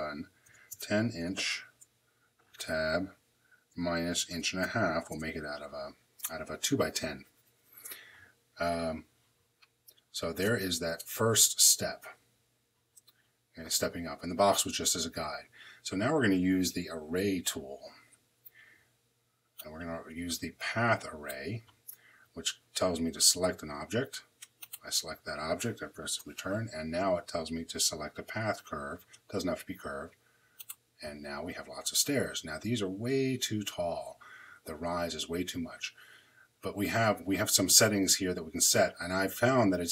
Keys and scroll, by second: 0.3 l, 0.6 0, 2.4 Tab, 4.0 |, 4.5 5, 5.0 Return, 26.0 Return.